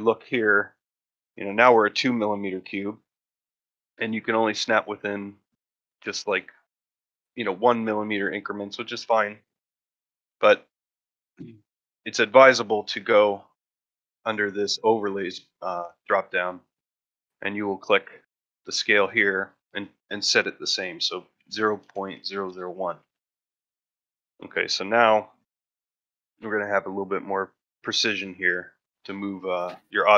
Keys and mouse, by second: 7.3 ctrl+middle drag, 7.7 shift+middle drag, 12.6 click, 24.8-25.4 ctrl+middle drag, 25.6 shift+middle drag, 27.2 ctrl+middle drag, 29.4 shift+middle drag.